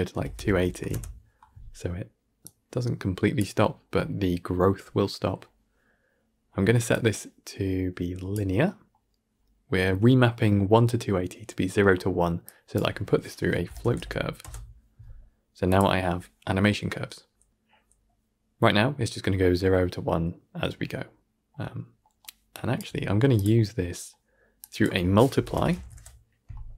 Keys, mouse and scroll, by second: 8.2-12.6 drag, 22.4 click.